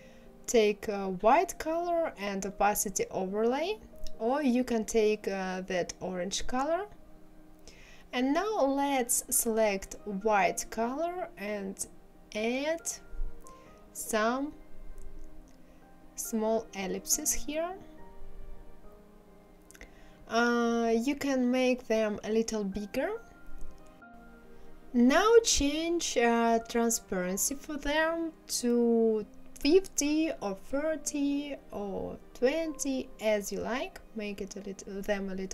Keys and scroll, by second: 30.6 KP_5, 30.9 KP_0, 31.3 Return.